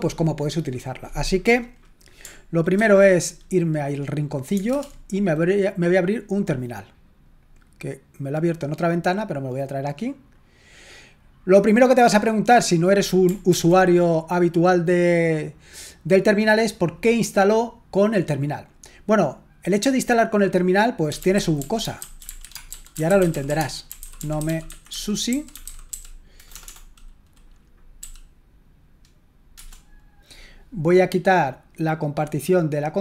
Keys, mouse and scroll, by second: 2.8 ctrl+1, 4.7 super+Return, 7.4-13.7 drag, 13.5 ctrl+l, 20.9-26.6 typing, 28.0 typing, 29.6 Return, 32.2 click.